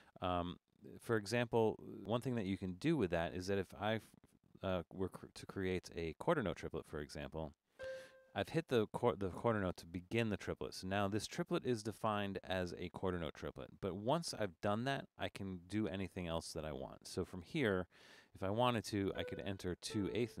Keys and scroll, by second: 3.3 alt+3, 6.0 Up, 18.3 Down, 19.1 4, 19.7 Down, 19.9 4.